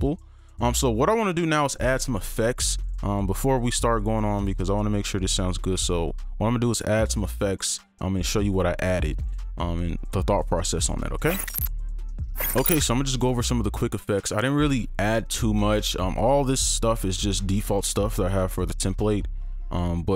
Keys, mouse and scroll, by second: 4.2 right click, 6.1 alt+click, 10.7 right click.